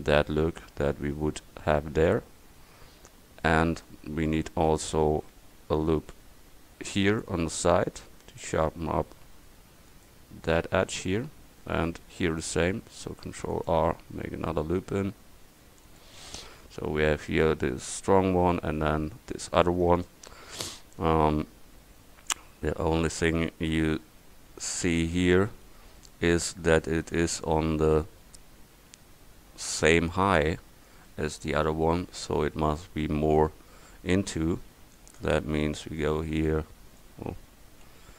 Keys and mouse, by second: 1.4 Tab, 6.2 ctrl+r, 13.0 ctrl+r, 16.3 Tab, 24.5 middle click, 34.2 a, 34.7 c, 37.0 click, 37.9 ctrl+z.